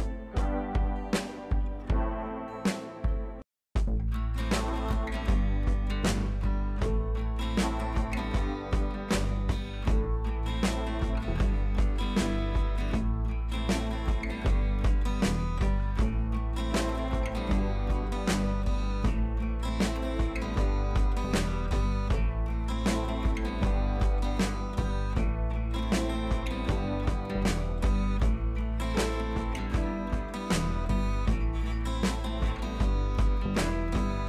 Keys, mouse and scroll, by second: 0.2 Down, 2.6 Right, 4.6 click, 6.2 click, 7.6 click, 16.7-18.2 drag, 28.6-30.4 shift+drag, 33.7 ctrl+].